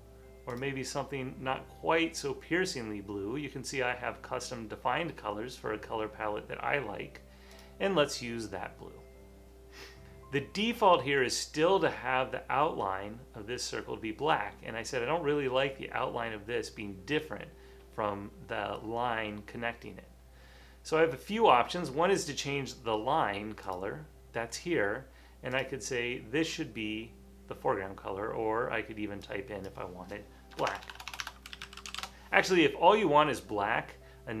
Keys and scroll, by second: 30.7-32.4 typing.